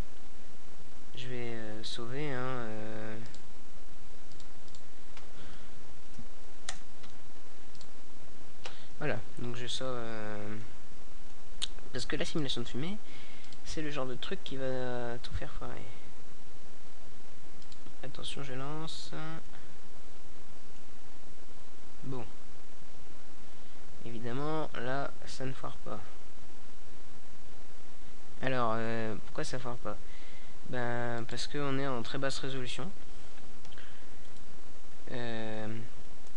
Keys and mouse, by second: 6.9 a, 10.0 click, 11.4-13.8 middle drag, 13.8 KP_0, 20.2 a, 22.2 a, 27.4 right click.